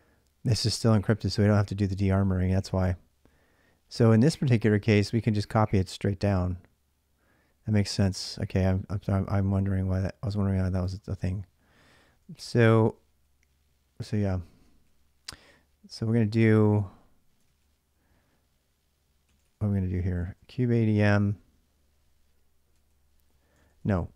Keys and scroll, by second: 12.4 ctrl+a, 14.7 ctrl+a, 17.4 ctrl+a, 19.1 ctrl+a, 19.8-20.9 typing, 22.3-23.4 typing.